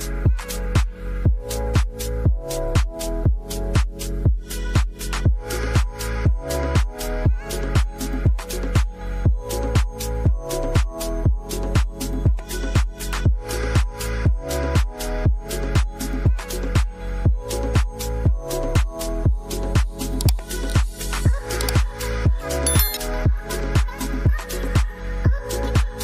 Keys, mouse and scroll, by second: 1.8-7.2 drag, 8.8-9.3 drag, 9.7 click, 10.6 middle click, 12.6 middle click, 14.0 KP_Decimal, 14.7-15.0 middle drag, 15.6 middle click, 16.7-17.2 middle drag, 17.7-18.2 middle drag, 19.1 middle click, 21.3 click, 22.2 KP_0, 24.1 ctrl+s.